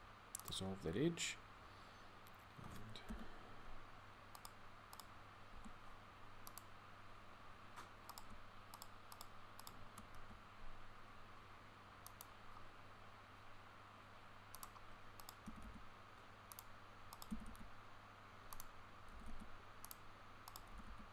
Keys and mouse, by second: 2.9 k, 5.3 a, 10.0 x, 15.3 g, 17.1 g.